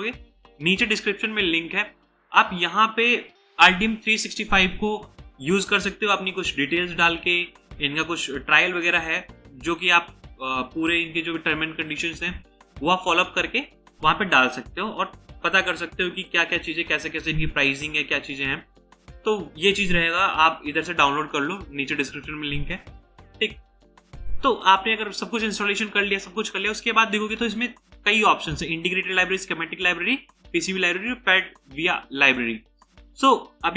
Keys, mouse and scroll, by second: 5.7-6.4 scroll down 1, 6.4-7.8 scroll up 1, 7.8 scroll down 1, 8.6-9.1 scroll up 1, 9.2-9.8 scroll down 1, 9.8 scroll up 1, 9.9 scroll down 1, 14.7-15.6 scroll down 1, 15.6 scroll down 1, 18.4 scroll down 1, 18.9 scroll up 1, 18.9 scroll down 1, 20.0 scroll down 1, 20.1-20.6 scroll up 1.